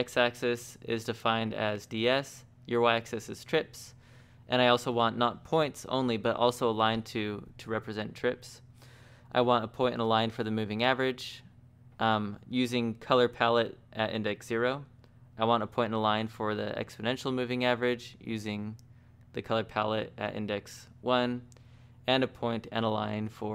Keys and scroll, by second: 1.7 shift+v, 5.1 j, 6.8 j, 11.3 j, 13.4 j, 18.9 j, 19.1 j.